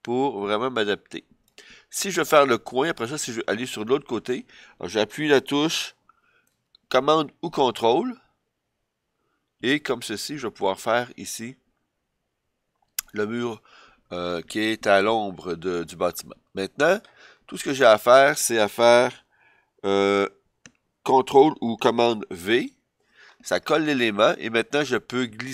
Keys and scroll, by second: 22.4 super+v.